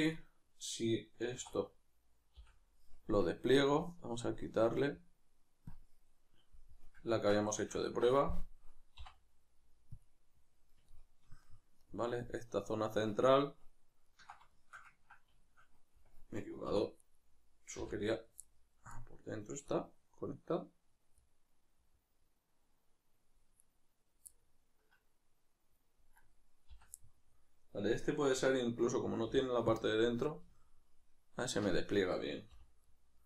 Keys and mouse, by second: 1.4 3, 1.6-3.8 right drag, 3.8-5.7 middle drag, 5.7-7.1 drag, 7.1-17.0 ctrl+middle drag, 7.4 a, 9.0 u, 16.7 3, 17.0-18.4 right drag, 18.4-23.6 middle drag, 23.6-24.3 right drag, 24.3-26.2 middle drag, 26.2 right click, 27.0-33.2 middle drag, 29.2 u, 32.5 h.